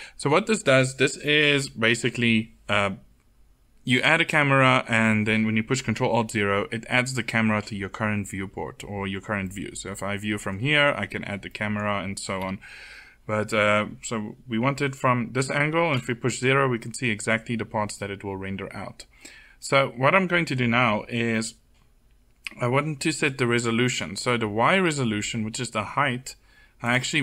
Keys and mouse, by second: 1.0-2.7 drag, 11.1 middle click, 12.0 KP_7, 15.5 KP_0, 26.4-27.2 drag.